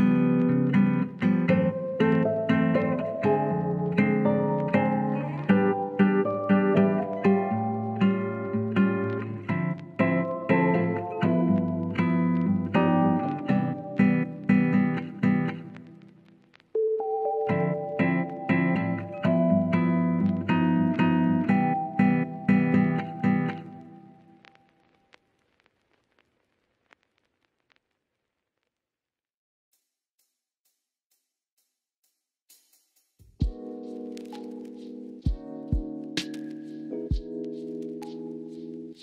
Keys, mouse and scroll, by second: 1.0-1.5 drag, 2.3-4.4 drag, 3.5 KP_0, 4.5-6.8 drag, 6.8 KP_0, 8.9 click, 10.0 click, 11.8 click, 14.8 click, 15.7-17.0 drag, 20.5 middle click, 22.4 shift+a, 28.9-31.0 middle drag, 28.9 scroll up 1, 29.4-31.0 scroll down 1, 31.0 s, 32.1 click, 38.9 click.